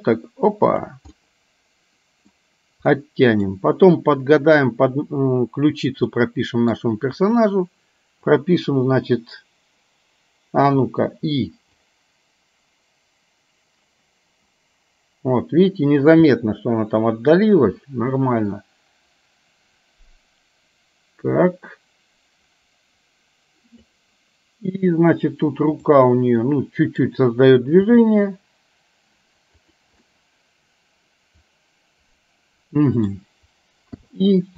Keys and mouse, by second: 1.2-2.3 middle drag, 3.0 middle click, 6.2 middle click, 10.7 i, 11.9-23.9 drag, 26.4 middle click, 27.9 g, 30.0-33.2 middle drag, 34.0 i.